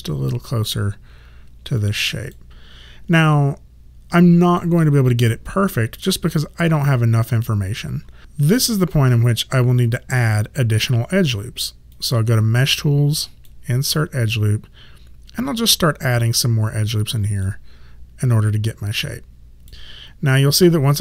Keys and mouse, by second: 8.2 right click, 12.0 click, 17.0 click, 19.1 click.